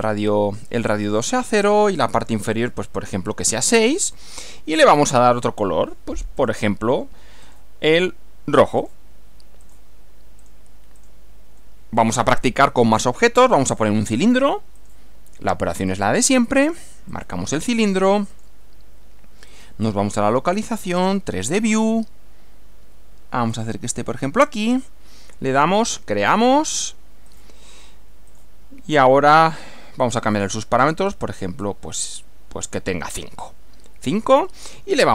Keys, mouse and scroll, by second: 1.1 click, 2.7 6, 4.4 click, 5.0 right click, 6.4 click, 7.4 click, 8.8 click, 9.6 click, 10.4 click, 11.0 click, 11.6-14.0 middle drag, 14.8 click, 15.9 click, 17.1 click, 18.3 click, 19.5 click, 20.7 click, 24.4 click, 25.8 click, 27.3 click, 28.3 click, 30.4 click, 30.8 scroll up 1, 31.6 scroll up 2, 32.1 scroll up 1, 34.1 click, 34.4 right click.